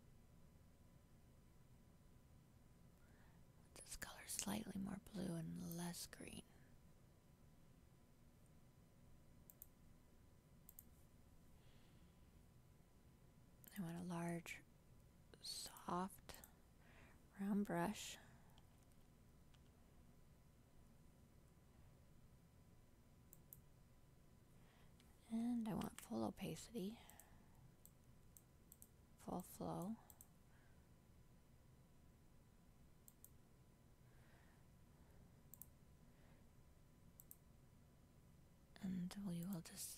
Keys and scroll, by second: 25.9 ctrl+z.